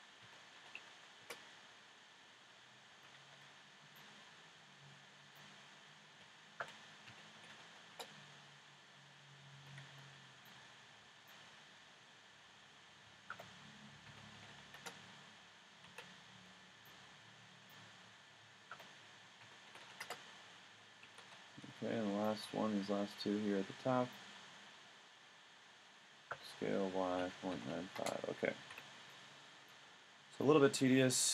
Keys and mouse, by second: 2.9 a, 3.4 b, 6.2 s, 9.6 a, 9.9 b, 11.5 s, 15.9 a, 16.4 b, 17.9 s, 21.1 a, 21.6 b, 24.7 s, 28.7 a.